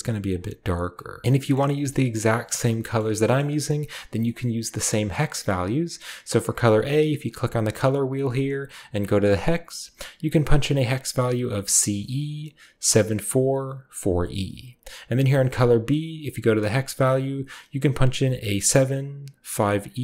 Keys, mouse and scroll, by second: 0.9-2.0 drag, 1.2 ctrl+v, 2.0 middle drag, 2.0-4.2 scroll down 1, 2.5 middle drag, 3.0 middle click, 3.4-4.2 middle drag, 4.4-6.3 middle drag, 7.2 click, 9.3 click, 15.4 click.